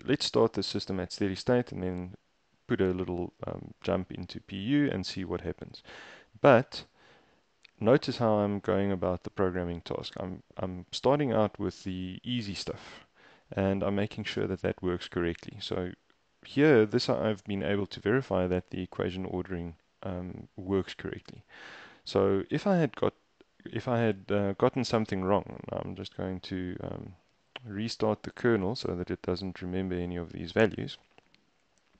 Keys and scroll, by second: 7.4 super+Tab.